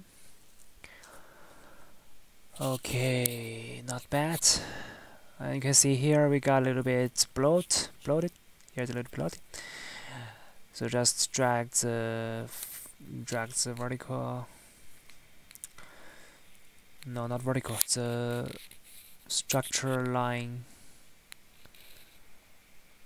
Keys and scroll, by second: 1.5 Tab, 3.1 Tab, 4.5 Tab, 9.0 Tab, 18.2 Tab, 18.9 Tab, 19.5 Tab, 20.3 Tab, 21.7 ctrl+z.